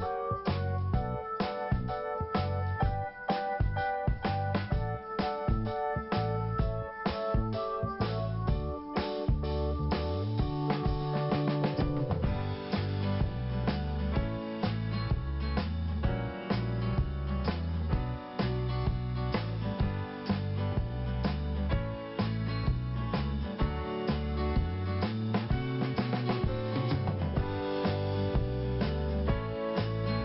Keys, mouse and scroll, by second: 0.8 click, 4.7 click, 4.7 click, 6.7 click, 7.2 click, 10.4-11.6 scroll down 1, 11.7 click, 14.2 click, 14.4 click, 14.5 click, 15.7 click, 20.7 l, 21.8 scroll up 1, 23.4 click, 24.1 click, 25.1 click, 25.2 click, 25.3 double click, 25.7 scroll down 1.